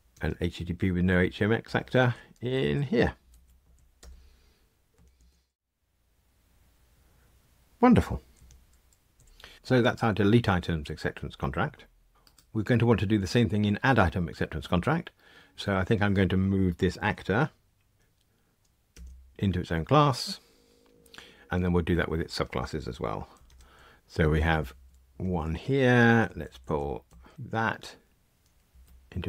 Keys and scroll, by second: 2.4 alt+Up, 27.3 alt+Return.